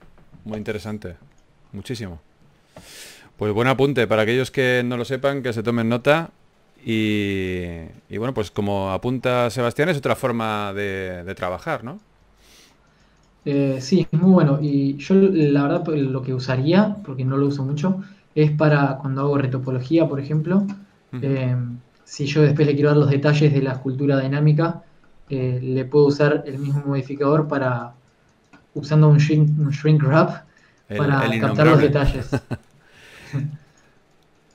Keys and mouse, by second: 1.2 Delete, 3.4 KP_1, 4.5 right click, 7.5 g, 7.9 f, 12.0 f, 15.6 f, 17.1 KP_3, 19.1 f, 21.9 KP_3, 22.9 f, 23.3-25.8 drag, 26.4 KP_1, 28.0 f, 28.2-29.8 drag, 29.2 f, 30.8 f, 31.7 f, 33.1 KP_3, 33.7 f.